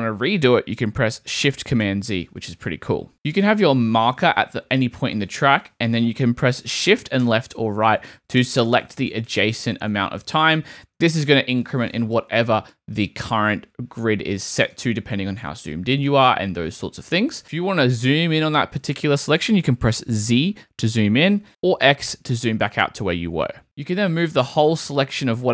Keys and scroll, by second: 1.8 shift+super+z, 5.1 Down, 7.2 shift+Left, 20.2 z, 21.8 x, 23.6 Right.